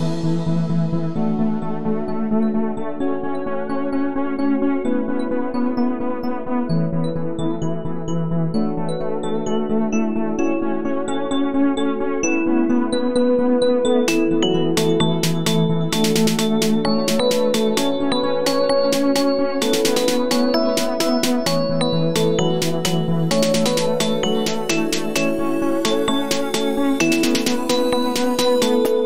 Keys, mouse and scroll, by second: 5.3 click, 6.3-9.4 drag, 19.0 click, 28.3 click.